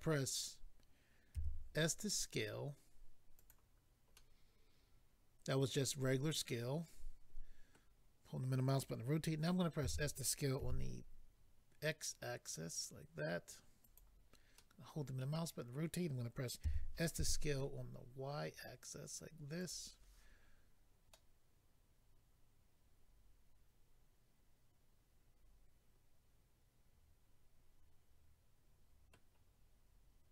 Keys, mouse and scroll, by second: 3.3 click, 3.5 click, 4.1 middle click, 10.6 s, 10.6 x, 13.8 click, 14.0 click, 14.6 middle click, 16.6 s, 17.1 y, 19.6 click, 19.7 click, 21.1 middle click.